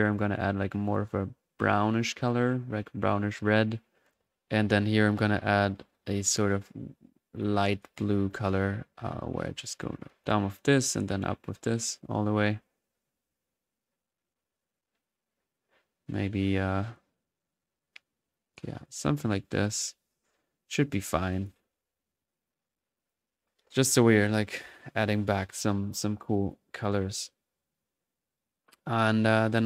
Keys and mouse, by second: 0.2 click, 0.3-1.5 drag, 4.1-4.9 drag, 5.0 click, 9.8-10.4 drag, 10.6-12.6 drag, 13.1-14.4 middle drag, 15.5 click, 15.8 click, 17.0-18.5 drag, 18.9-19.9 drag, 20.1 click, 21.3-22.0 drag, 21.7 1, 22.4-23.5 drag, 23.7-28.1 ctrl+drag, 28.1-29.6 middle drag.